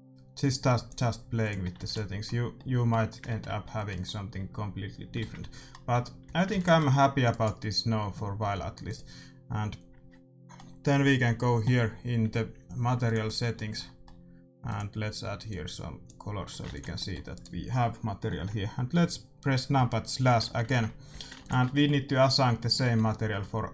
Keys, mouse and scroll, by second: 1.5-3.3 drag, 1.8 ctrl+s, 2.5-5.6 middle drag, 5.2 shift+z, 5.9 a, 6.2 a, 6.4 ctrl+s, 7.2-9.4 right drag, 9.0-10.5 drag, 13.0-16.4 drag, 16.4 a, 16.6 ctrl+s, 16.9 middle click, 17.3-19.1 right drag, 20.5-23.7 middle drag, 21.0 a, 21.7 ctrl+s.